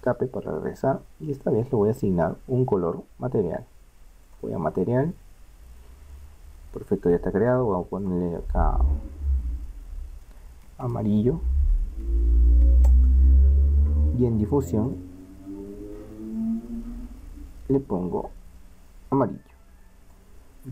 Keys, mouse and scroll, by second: 1.1 middle click, 1.6 right click, 7.6-12.2 drag, 12.2 l, 14.8-16.4 drag, 16.5 click.